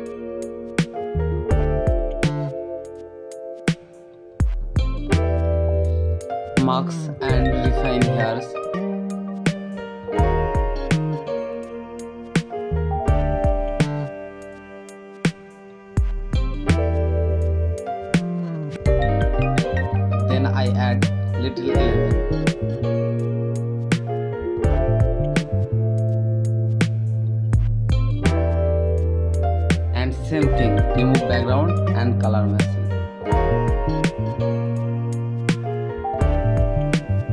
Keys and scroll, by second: 0.8 space, 1.9 ctrl+Return, 2.1-3.6 typing, 5.0 space, 5.2 ctrl+t, 5.7 Return, 6.4 ctrl+s, 7.1 space, 7.6 [, 9.0 [, 9.4 space, 11.0-18.8 typing, 18.1 ctrl+z, 20.3 space, 26.1 space, 26.5 space, 28.6 space, 29.1 space, 35.3 space, 36.2 ctrl+Return, 36.8 v.